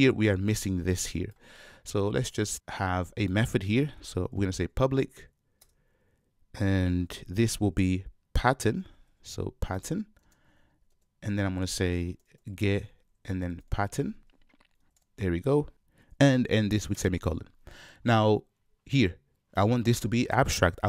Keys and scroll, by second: 5.7 Return, 10.9 ctrl+space.